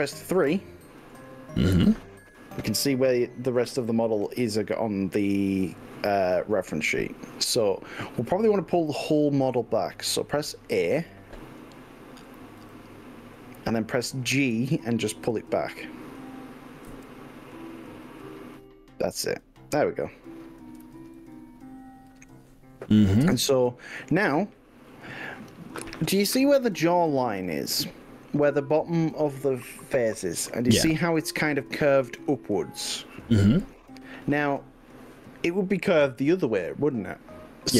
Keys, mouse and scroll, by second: 0.3 KP_3, 12.8 a, 14.4 g, 17.0 y, 21.2 click.